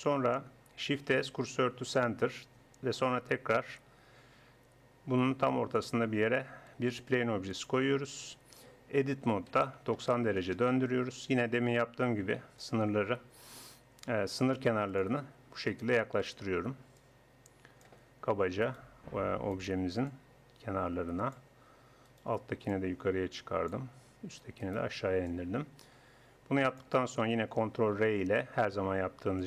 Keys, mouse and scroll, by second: 1.2 shift+s, 5.8-7.6 drag, 6.8 shift+a, 8.6 Tab, 9.2 r, 12.6-15.7 drag, 16.2-17.6 middle drag, 17.6-18.6 drag, 18.8-20.1 right drag, 22.0 middle click, 24.0-25.2 drag, 26.5 click, 27.8 ctrl+r.